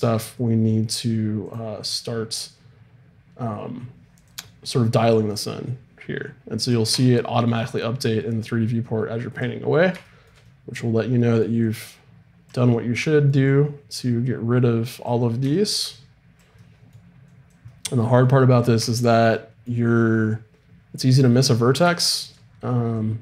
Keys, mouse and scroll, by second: 1.4-4.4 drag, 5.2-7.0 drag, 7.7-9.6 drag, 9.6-12.2 middle drag, 11.7-15.5 drag, 15.7 middle click, 16.0-19.1 drag, 18.5-21.1 middle drag, 19.9-21.6 drag, 21.4-23.1 middle drag, 23.0-23.2 drag.